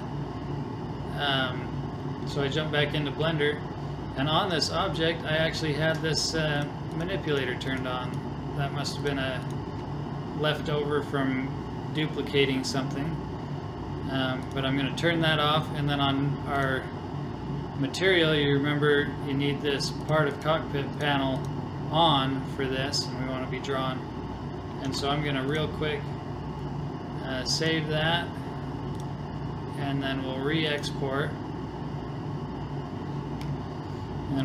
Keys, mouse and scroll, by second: 2.4-4.3 middle drag, 6.2-11.3 drag, 14.5-16.3 drag, 16.6-18.4 drag, 20.0-23.2 drag, 24.9 ctrl+s, 27.6-32.5 drag.